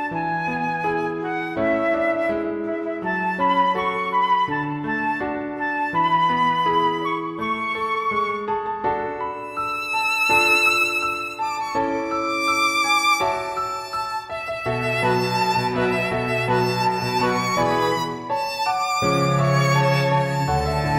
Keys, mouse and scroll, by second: 0.1 click, 1.2 middle click, 1.9 middle click, 3.1 ctrl+z, 3.7 shift+middle click, 4.3 scroll down 1, 4.6 scroll up 1, 4.9 scroll down 1, 6.4 scroll down 1, 6.6 shift+middle click, 7.9-8.4 scroll up 2, 9.0 middle click, 12.9 middle click, 13.4 middle click, 15.1 scroll down 1, 15.4 middle click, 16.3 middle click, 18.3 alt+middle click, 20.1 click.